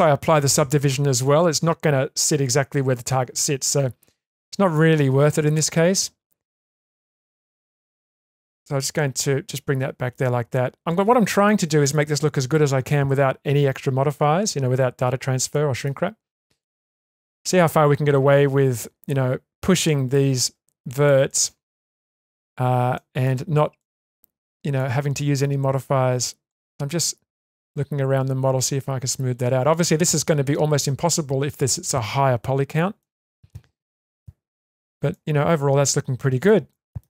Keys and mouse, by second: 3.7-4.7 middle drag, 5.5 click, 5.8-7.3 drag, 7.6-10.1 middle drag, 10.4 Tab, 11.4-11.8 middle drag, 12.1-12.5 shift+middle drag, 15.5-15.8 shift+middle drag, 16.4 middle click, 16.8 Tab, 17.2-20.1 middle drag, 21.0 click, 21.3-22.4 middle drag, 23.0 shift+middle click, 23.8-24.8 ctrl+middle drag, 25.8 click, 26.7-31.5 middle drag, 33.0-33.5 middle drag, 34.1 Tab, 35.1-36.4 middle drag, 36.7 middle click.